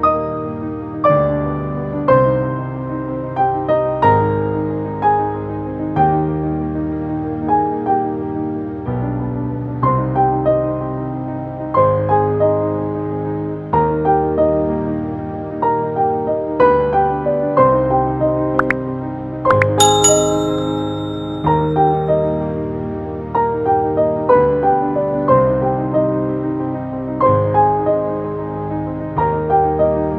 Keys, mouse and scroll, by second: 1.4 Left, 3.5 click, 3.8 Right, 6.5 Right, 6.8 ctrl+space, 7.4 ctrl+space, 7.7 ctrl+space, 8.6 click, 12.1 a, 12.3 click, 13.1 right click, 13.9 click, 24.1 space, 24.3 click, 25.8 v, 26.4 click, 27.1 right click, 27.8 click.